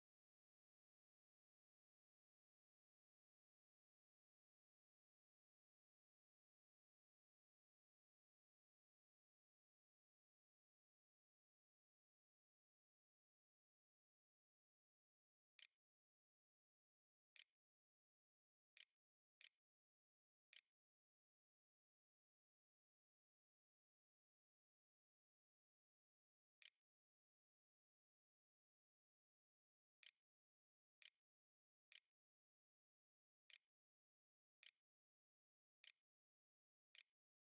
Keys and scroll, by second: 14.5-23.9 typing, 25.4-28.7 typing, 30.8-37.4 typing.